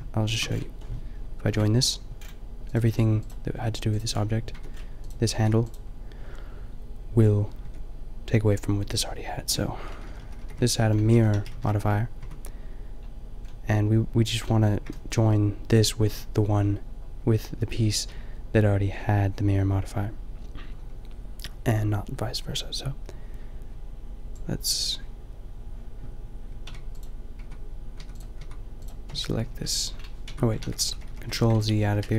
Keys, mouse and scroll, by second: 1.5 ctrl+j, 3.6 g, 4.6 Tab, 5.4 g, 7.6 Tab, 8.9 Tab, 10.0 ctrl+z, 10.1 ctrl+z, 10.3 ctrl+z, 10.4 ctrl+z, 11.1 ctrl+shift+z, 11.3 ctrl+shift+z, 11.5 ctrl+shift+z, 12.3 Tab, 24.3-25.9 drag, 27.5 Tab, 28.0 Tab, 28.4 Tab, 29.5 ctrl+l, 30.3 Tab, 30.6 ctrl+z, 30.9 ctrl+z, 31.0 ctrl+z, 31.1 ctrl+z, 31.6 ctrl+z, 31.9 ctrl+z, 32.1 ctrl+z.